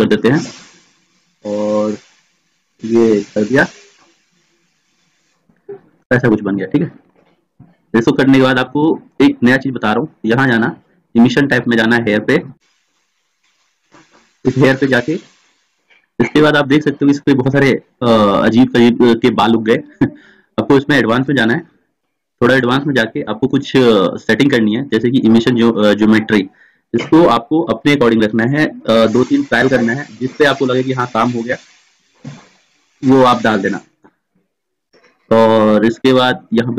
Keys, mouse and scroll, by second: 24.0-26.1 middle drag, 26.1-27.4 drag, 27.4-36.4 middle drag, 36.4-36.7 drag.